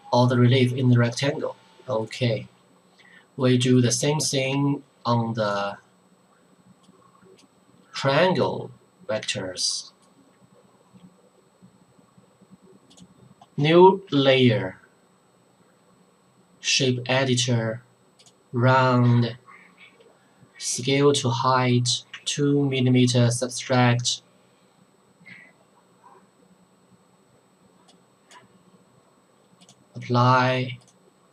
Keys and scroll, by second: 14.1 Return, 22.1 2.